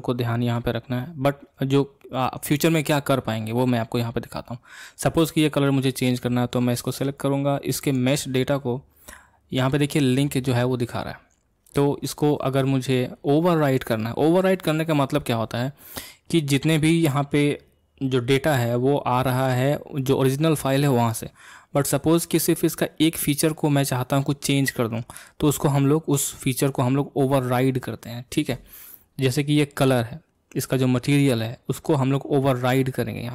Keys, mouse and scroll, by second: 0.0 click, 1.0-12.4 middle drag.